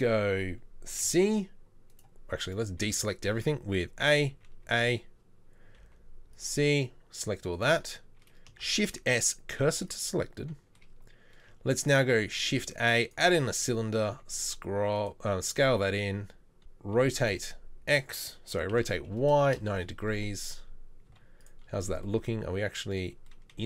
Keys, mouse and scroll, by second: 1.1 c, 2.9 z, 3.8 a, 4.4 a, 4.7 a, 5.9 c, 8.7 shift+s, 12.2 shift+a, 14.3 s, 15.7 s, 17.0 r, 20.1 z, 21.1 z.